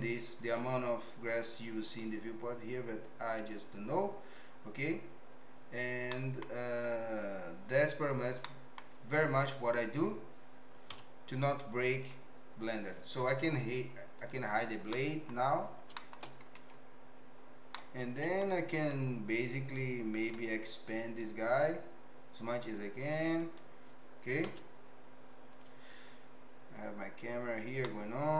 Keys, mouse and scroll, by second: 6.2 middle click, 8.5 middle click, 10.9 KP_0, 14.2 click, 14.9 middle click, 16.0 shift+middle click, 16.6 Tab, 17.7 middle click, 18.8 click, 20.3 s, 22.6 click, 24.4 KP_0, 26.9 click, 27.8 middle click.